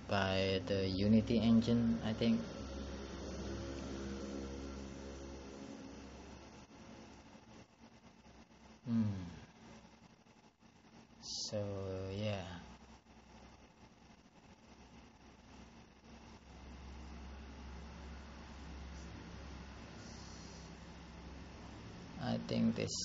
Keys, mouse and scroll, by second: 1.9 click, 3.6 click, 5.5 click, 6.7 click.